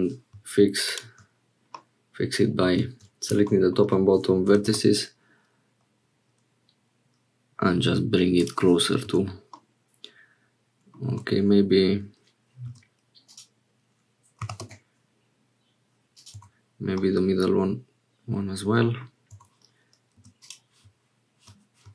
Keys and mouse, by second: 1.7-2.7 drag, 4.4 g, 9.1 Tab, 9.6-11.0 drag, 11.1 Tab, 12.6 2, 13.2 click, 14.4 g, 16.3 Tab, 17.0-19.1 drag, 19.3 Tab, 20.1 2, 20.4 click.